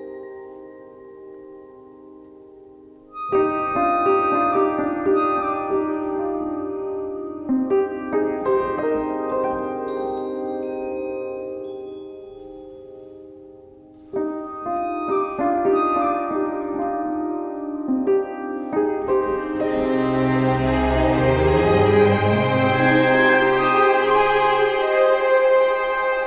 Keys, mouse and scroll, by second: 2.1 scroll, 2.7 scroll, 3.1 middle click, 3.2 middle click, 3.3 scroll, 4.0 middle click, 4.6-5.7 scroll, 5.9 a, 6.7 click, 7.7 q, 10.2 alt+middle click, 10.7 alt+scroll, 11.1 click, 11.7 3, 11.8 Return, 12.7 scroll, 13.0 Return, 13.0 middle click, 14.2-14.7 scroll, 14.7 ctrl+j, 15.6-16.0 scroll, 16.9 alt+middle click, 18.5 alt+middle click, 18.8 ctrl+k, 21.3 click, 21.7 click, 22.7 alt+middle click, 23.6 click, 24.3 alt+middle click, 24.8 click, 25.5 alt+middle click, 25.9 a.